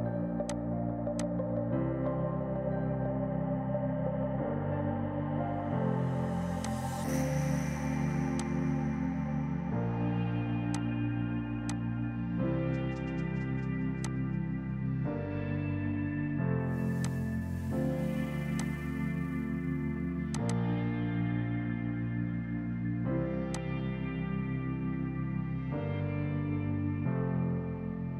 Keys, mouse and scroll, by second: 4.6 right click, 6.7 click, 8.4 alt+click, 13.5 F4, 14.1 click, 14.9-15.7 typing, 17.1 click, 18.6 click, 21.0 space, 23.6 click.